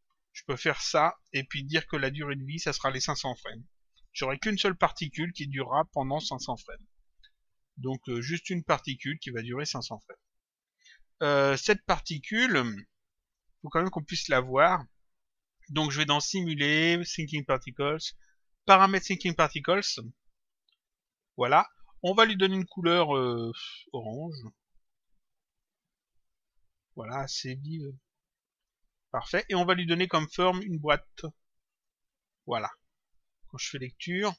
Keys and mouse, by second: 0.9 click, 2.1 click, 4.1 Return, 8.0 click, 10.7 click, 12.9 click, 15.9 click, 18.9 click, 20.9 click, 22.4 click, 23.9 click, 27.9 click, 29.2 click, 30.4 click, 31.7 click, 33.0 click.